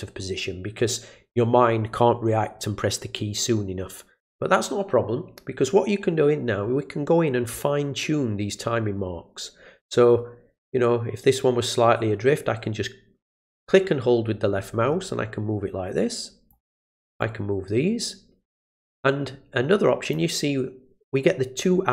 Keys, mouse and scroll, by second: 11.4-16.5 drag, 17.2-20.1 drag.